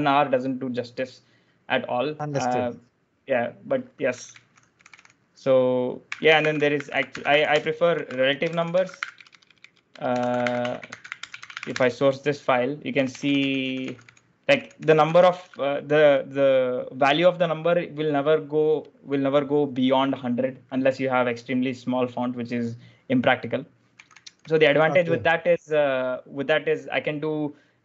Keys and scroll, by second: 3.7-15.7 typing, 23.5-25.0 typing.